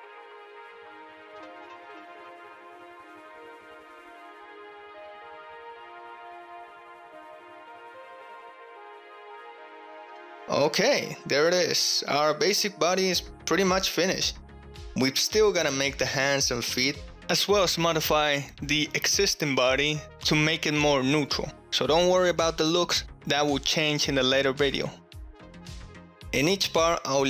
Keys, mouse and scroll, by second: 0.0-1.2 typing, 0.7 click, 1.0 click, 1.3 click, 1.6 shift+middle click, 1.7 click, 1.9 click, 2.0 shift+click, 2.2 alt+2, 2.3 click, 2.5-10.0 typing, 3.0 click, 3.3 middle click, 3.3 click, 3.6 shift+middle click, 3.8 alt+middle click, 4.4 ctrl+middle click, 4.4 ctrl+click, 7.9 click, 9.3 click, 10.1 ctrl+click, 10.2 ctrl+middle click, 10.6 Tab, 10.9-11.7 drag, 11.7 ctrl+middle click, 11.9-12.2 ctrl+drag, 12.2 middle click, 12.3-12.7 drag, 12.7 shift+middle click, 13.0 shift+drag, 13.5-14.5 ctrl+drag, 14.6-15.1 drag, 15.5 shift+click, 16.6-17.7 drag, 17.7-20.1 middle drag, 20.2-20.5 shift+middle drag, 20.9-21.2 shift+middle drag, 21.5-24.0 ctrl+middle drag.